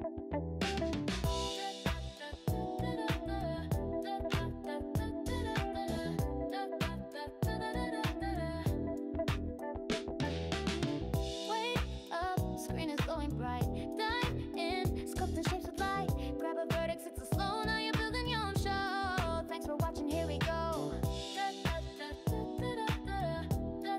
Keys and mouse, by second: 10.3 click, 11.0 click, 15.2 click, 17.5 click.